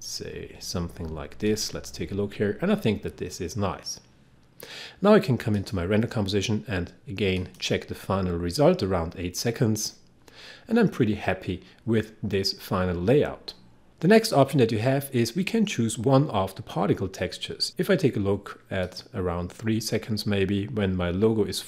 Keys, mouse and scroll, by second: 1.5 click, 5.5 click, 18.9 click.